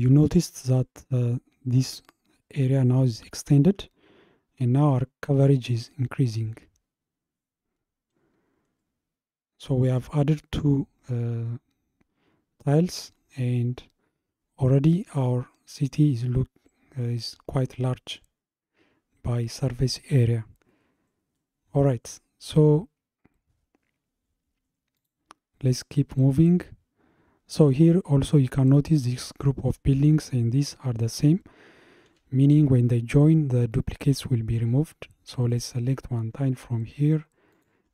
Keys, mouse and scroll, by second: 4.0-4.4 scroll up 2, 9.0-11.6 scroll down 2, 13.0-15.9 middle drag, 18.3-18.9 scroll up 2, 20.8-21.4 scroll down 2, 21.4-24.4 middle drag, 25.0 click, 26.0 scroll up 1, 26.6-29.0 scroll up 1, 35.5 click, 37.5 shift+click.